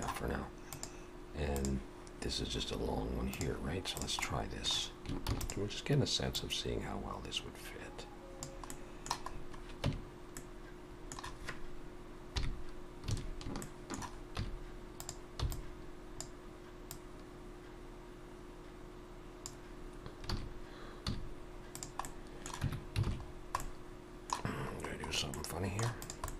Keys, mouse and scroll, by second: 4.0 click, 4.2 middle click, 5.3 shift+d, 6.4 click, 8.7 middle click, 9.3 scroll up 3, 9.9 Tab, 10.4 middle click, 12.3 KP_3, 13.2 alt+a, 13.6 shift+middle click, 14.0 scroll up 1, 14.4 z, 15.4 b, 16.9 click, 20.3 alt+a, 21.1 z, 22.1 middle click, 22.7 Tab, 23.1 alt+a, 23.3-24.5 scroll down 3, 23.6 middle click, 24.5-25.9 scroll up 5, 25.4 middle click, 26.0 click, 26.2 middle click.